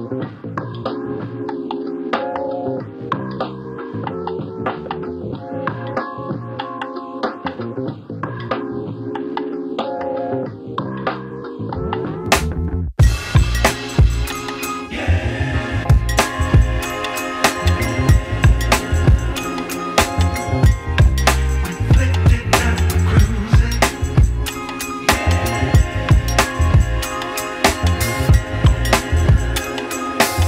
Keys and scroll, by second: 3.9 space, 30.2 ctrl+alt+z.